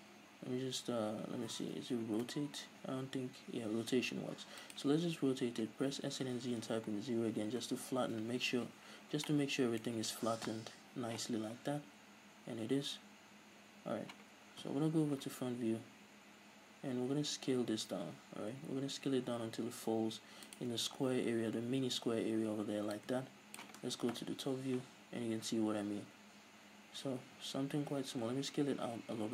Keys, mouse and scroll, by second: 2.0 r, 5.8 s, 7.8 Return, 8.6 z, 8.9-9.3 scroll down 2, 9.3-10.4 middle drag, 10.5 KP_3, 11.0 middle click, 11.2 z, 14.6 KP_1, 18.0 s, 20.6-22.5 shift+drag, 23.6 click, 24.2 KP_7, 27.7 s.